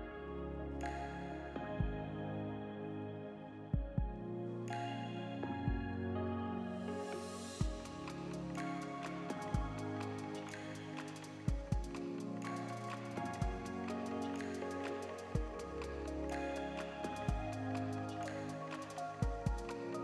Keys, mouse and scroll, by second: 0.0 click, 0.7 middle click, 1.2-1.5 scroll up 3, 1.4 shift+middle click, 2.4 middle click, 2.4 click, 2.6 shift+middle click, 3.4 KP_Decimal, 3.8-4.4 scroll down 7, 4.4 r, 6.3 middle click, 8.2 click, 10.3 middle click, 11.2 middle click, 17.6 click, 19.7 click.